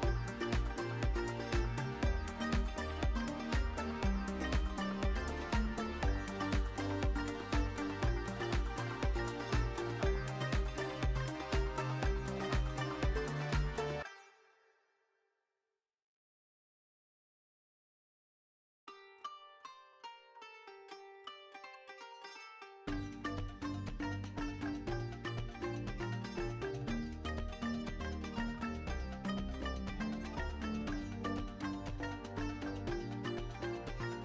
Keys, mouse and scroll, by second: 0.2 KP_0, 1.9 ctrl+s, 2.6 click, 2.7-3.0 alt+middle drag, 3.6 shift+d, 3.7 x, 4.7 drag, 5.7 click, 7.7-9.2 drag, 8.8 KP_0, 10.2 ctrl+s, 10.8 `, 11.7-12.1 alt+shift+middle drag, 12.9 `, 14.3 shift+d, 14.8 y, 16.0 click, 18.5 click, 20.7 click, 22.4 click, 22.9 s, 23.8-26.6 drag, 26.3 KP_0, 28.0 ctrl+s, 29.2 drag, 30.1-30.8 drag, 31.6 click.